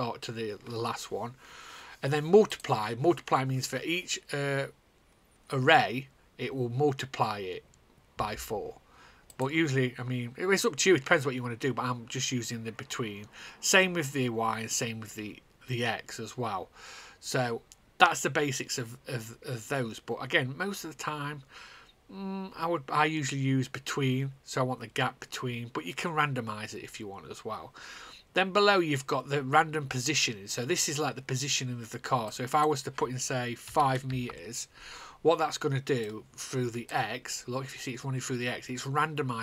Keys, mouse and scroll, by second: 3.1 click, 9.8 click, 33.6 5, 34.8 Return, 36.0 click, 36.6 click.